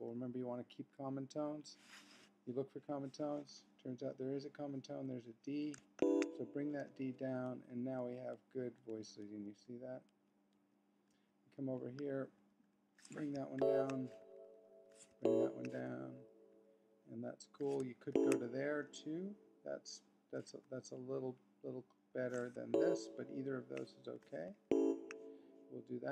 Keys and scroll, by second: 4.1 Left, 4.9 Right, 6.0 shift+Down, 7.4 Left, 8.0 Right, 8.4 Left, 8.8 Right, 9.2 Left, 9.6 Right, 10.1 Left, 10.5 Right, 12.1 super+Up, 13.6 shift+Down, 14.3 super+Up, 15.2 shift+Down, 16.1 super+Up, 18.1 shift+Down, 20.9 super+Up, 22.1 super+Down, 22.7 shift+Up, 24.7 shift+Down.